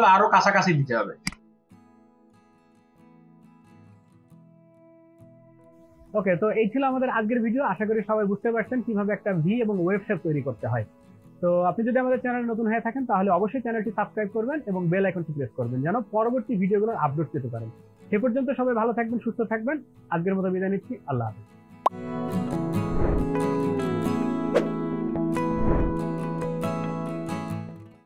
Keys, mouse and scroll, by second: 1.0 space, 2.1 space, 2.3 ctrl+alt+click, 5.1 Delete.